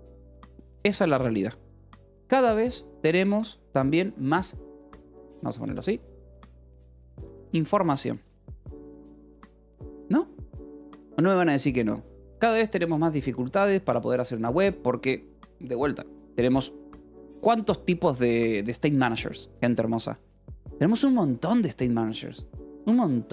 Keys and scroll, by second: 0.0-0.3 typing, 4.5-9.9 typing.